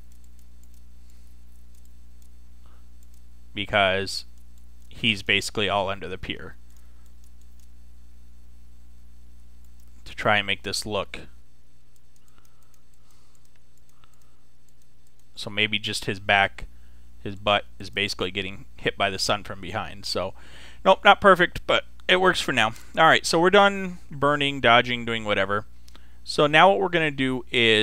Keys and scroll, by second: 11.0 [.